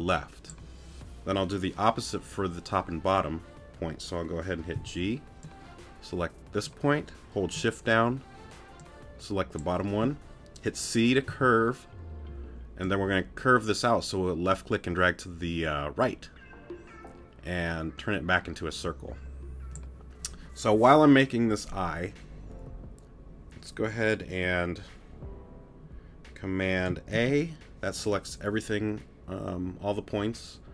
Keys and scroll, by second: 4.7 g, 11.3 c.